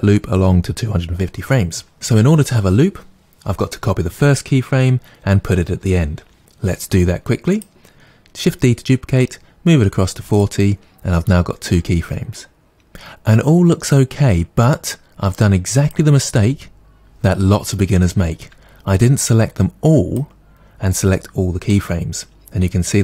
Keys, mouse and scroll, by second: 7.5 click, 7.9 shift+d, 10.4 click, 12.1-20.9 drag.